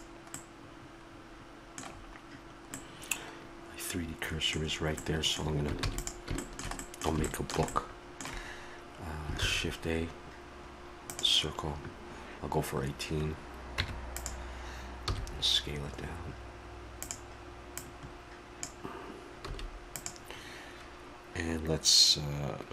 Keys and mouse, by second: 0.5 middle click, 0.9-2.8 middle drag, 3.6 middle click, 4.7-5.8 middle drag, 5.8 ctrl+s, 9.4 shift+a, 13.8 Tab, 15.1 s, 17.8-19.7 drag, 19.5 s.